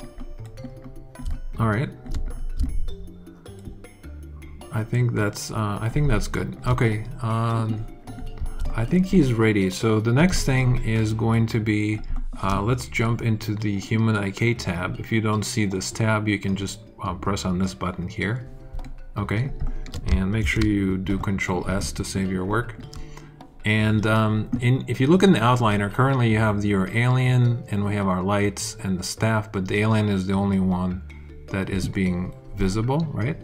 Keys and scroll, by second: 20.4 alt+super+s, 21.0 super+s.